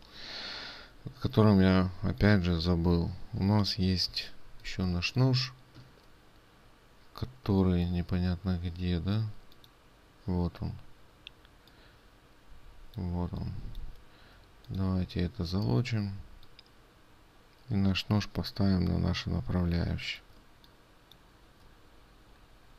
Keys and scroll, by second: 21.0 ctrl+space.